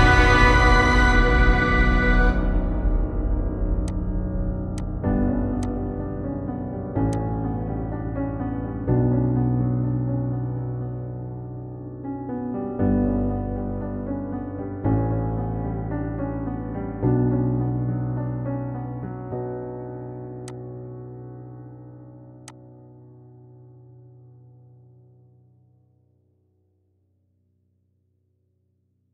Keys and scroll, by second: 14.4 ctrl+alt+shift+e.